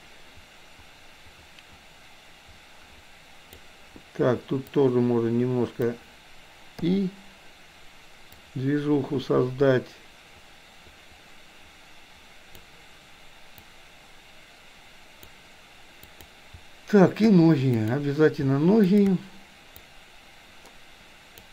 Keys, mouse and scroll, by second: 4.6 click, 5.0-6.0 drag, 6.8 i, 8.4-12.6 drag, 13.6-15.3 drag, 16.1 click, 17.9 click, 18.9 shift+click, 19.8-21.5 drag.